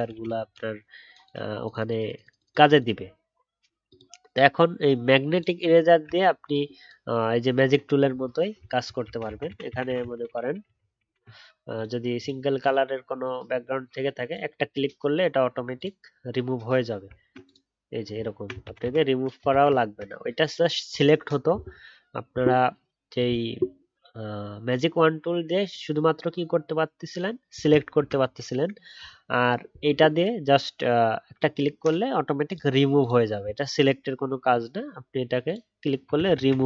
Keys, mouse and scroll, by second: 9.0 ctrl+z, 9.2 ctrl+z, 9.6 ctrl+z, 9.8 ctrl+z, 10.1 ctrl+z, 10.2 ctrl+z, 10.4 ctrl+z, 10.5 ctrl+z, 10.6 ctrl+z, 10.7 ctrl+z, 17.1 alt+scroll up 1, 18.1-18.6 alt+scroll down 1, 18.6 ctrl+z, 18.8 ctrl+z, 19.5 ctrl+z, 36.5 ctrl+z.